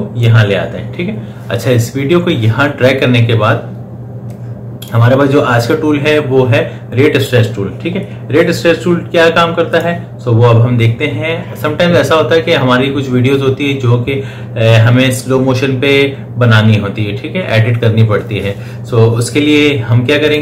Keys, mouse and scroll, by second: 4.1-9.5 drag, 20.1 click.